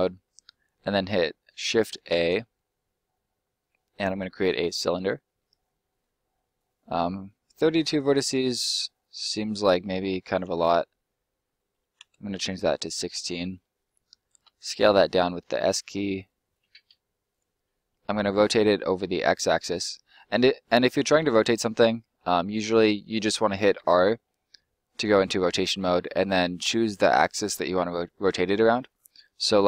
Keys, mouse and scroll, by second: 1.9 shift+a, 4.9 click, 5.3 middle click, 11.6 1, 12.0 Return, 12.7 middle click, 14.4 s, 17.2 click, 19.9 middle click, 23.7 r, 29.0 right click, 29.3 scroll up 1, 29.4 middle click.